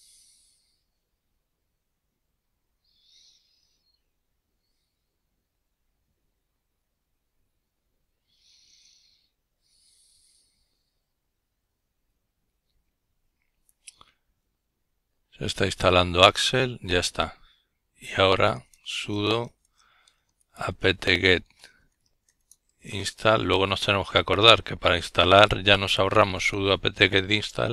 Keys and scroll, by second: 15.1-20.3 typing, 25.3-27.7 typing.